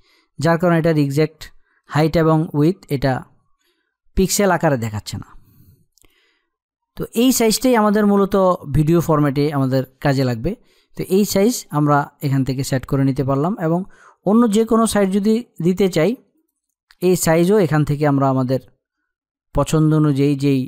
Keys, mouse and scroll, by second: 5.7 click, 7.1 space, 7.2 click, 7.7 space, 11.5 click, 14.6 click, 20.5-20.6 scroll down 1.